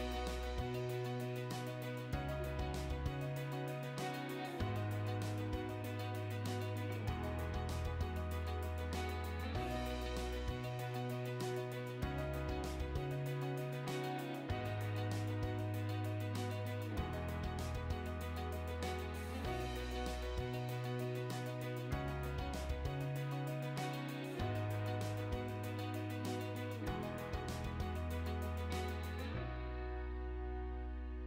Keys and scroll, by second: 1.7 space, 5.4 Delete, 7.9 space, 13.6-15.1 typing, 18.4 Escape, 19.9 Delete, 23.2 Delete, 25.9 h, 26.1 space, 30.8 space.